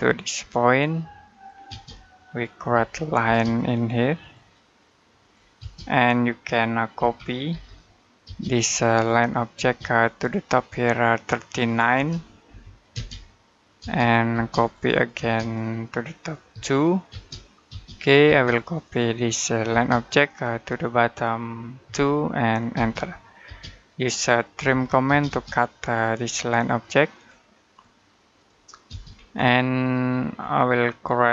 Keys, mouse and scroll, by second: 1.1 click, 1.5 space, 1.8 middle click, 2.6 l, 3.1 space, 4.0 click, 5.4 space, 6.8-8.1 typing, 8.6 click, 9.4 space, 9.9 click, 11.8-12.7 typing, 14.4 click, 15.0 space, 15.2 click, 16.4-16.9 typing, 19.5 space, 20.1 click, 21.7-22.6 typing, 24.4-24.9 typing, 25.9 click, 28.7 space, 29.0-29.8 scroll up 1, 29.8 middle click, 30.2-31.3 scroll up 1.